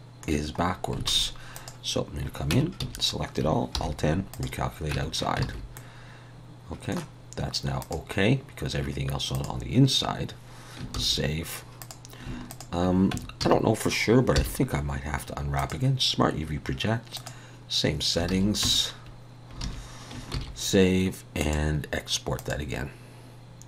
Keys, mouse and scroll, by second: 0.6-1.1 scroll up 2, 1.5 click, 2.5 Tab, 2.8 a, 3.7 alt+n, 4.9 Tab, 5.4 alt+a, 5.7 middle click, 7.8 click, 11.0 ctrl+s, 11.8 click, 12.5 shift+click, 13.1 Tab, 13.4 a, 14.3 u, 18.3 alt+a, 18.6 Tab, 19.6 alt+a, 20.3 ctrl+s, 21.4 click.